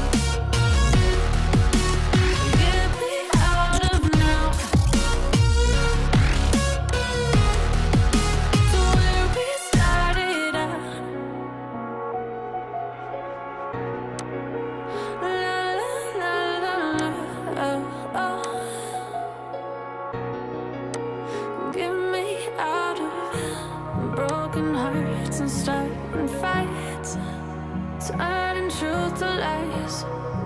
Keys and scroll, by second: 25.8 ctrl+shift+g.